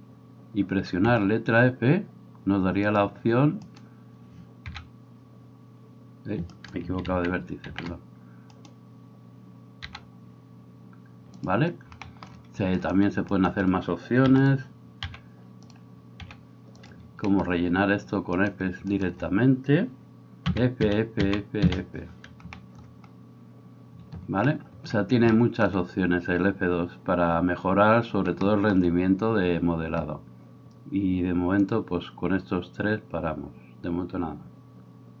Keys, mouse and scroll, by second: 1.1 f, 3.8 right click, 3.9-8.6 middle drag, 4.7 f, 7.1 ctrl+z, 7.6 ctrl+z, 8.6 right click, 8.7-12.8 middle drag, 9.9 f, 12.8 right click, 13.0 shift+middle click, 13.4 shift+right click, 13.5-18.4 middle drag, 14.3 e, 15.1 g, 16.3 r, 18.4 right click, 18.5 shift+middle click, 19.0 shift+right click, 19.1-35.2 middle drag, 20.6 f, 20.8 f, 21.3 f, 21.7 f.